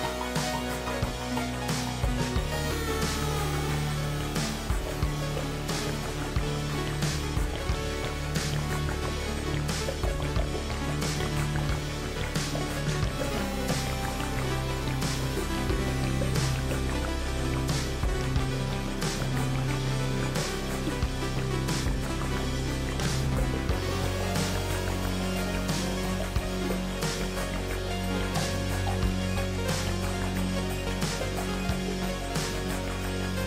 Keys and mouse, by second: 10.0 KP_Decimal, 12.9 2, 15.8 click, 21.0 click, 26.2 g, 28.5 2, 29.1 click, 32.4 click.